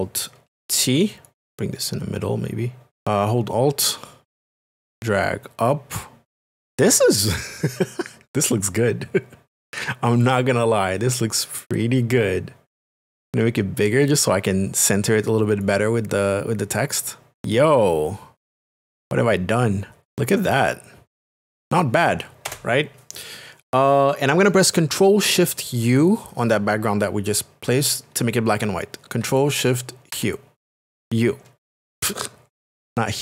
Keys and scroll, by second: 1.3 alt+t, 22.5 Return.